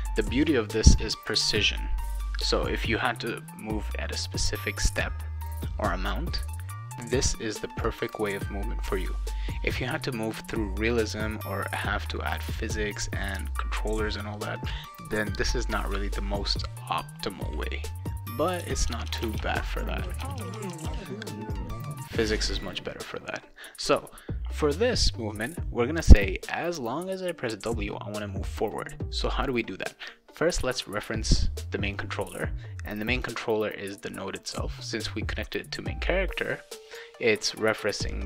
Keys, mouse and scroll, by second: 18.4 click, 18.6-20.9 typing, 22.5 click, 32.0-33.2 drag, 36.8 click.